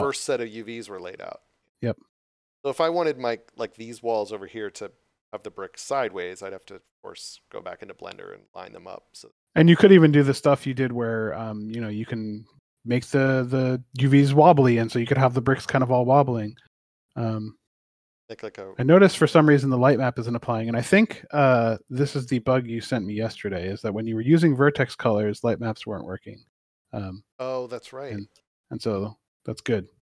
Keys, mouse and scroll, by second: 0.6 d, 1.3 d, 2.8 w, 4.8 w, 6.7 a, 25.4 click, 26.2 a, 26.2 w, 27.9 s, 29.7-30.0 typing.